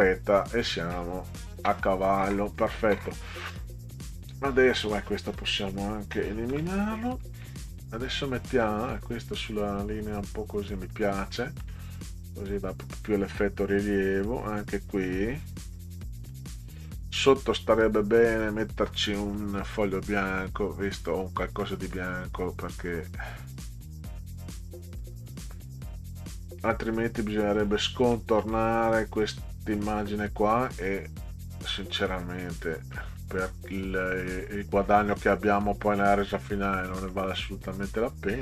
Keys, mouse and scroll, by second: 2.5 click, 3.4 click, 4.3 click, 5.2 click, 7.9 click, 8.6-10.8 drag, 11.4 middle click, 12.5-15.7 drag, 16.3 middle click, 18.0 click, 21.1 click, 21.6 middle click, 24.9-27.8 drag, 28.1 middle click, 31.8 click, 32.9 middle click, 35.0 click, 36.9 middle click.